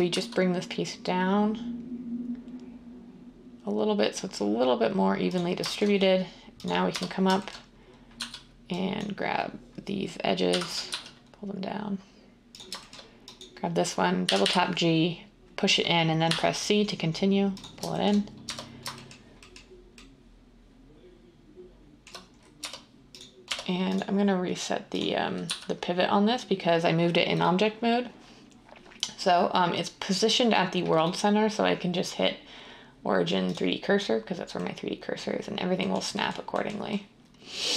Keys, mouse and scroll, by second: 6.8 Tab, 8.1 typing, 10.2-10.9 typing, 14.2 g, 14.4 g, 16.2 c, 18.4 Tab, 22.5 Tab, 23.4 Tab, 25.4 z.